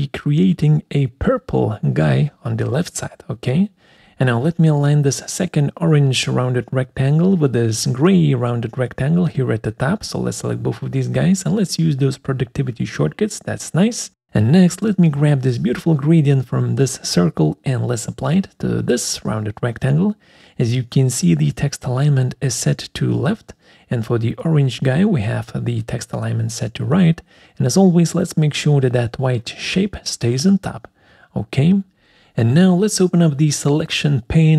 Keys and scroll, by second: 12.6 ctrl+Right, 13.0 ctrl+Up, 17.0 ctrl+shift+c, 19.0 ctrl+shift+v, 34.5 F6.